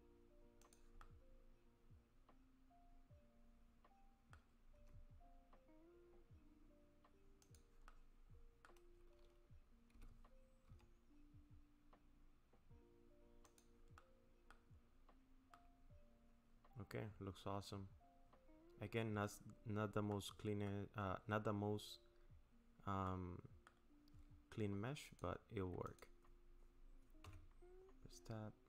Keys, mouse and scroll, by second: 1.0 middle click, 4.8 r, 7.9 middle click, 10.0 g, 14.0 middle click, 15.5 middle click, 19.3 scroll up 1, 20.1 middle click, 23.1 middle click, 25.1 click, 25.9 click, 27.3 Tab.